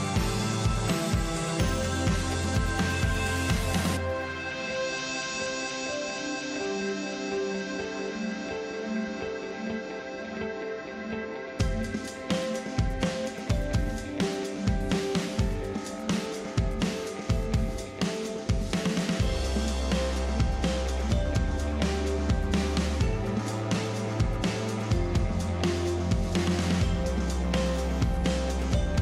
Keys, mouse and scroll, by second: 0.1 click, 1.1 click, 5.4 click, 11.1 click, 13.4 click, 17.7 click, 22.2 click, 24.4 click.